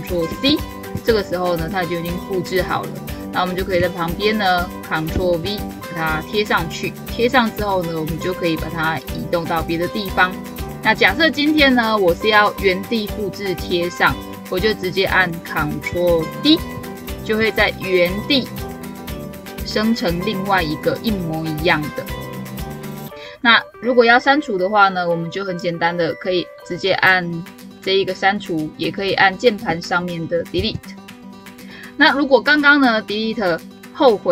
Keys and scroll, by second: 0.1 ctrl+c, 4.9 ctrl+v, 16.6 ctrl+d.